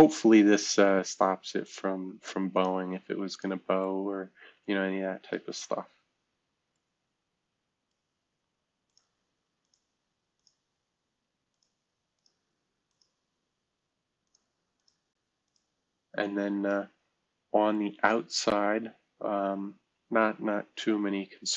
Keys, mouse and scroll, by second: 1.6 click, 2.5 click, 3.3 click, 3.8-5.3 middle drag, 8.9 click, 9.6 click, 10.4 click, 11.5 click, 12.2 click, 12.9 click, 14.2 click, 14.8 click, 15.4 click, 16.1-16.7 middle drag, 16.7 right click, 17.2-17.7 scroll down 1, 17.7-20.2 right drag.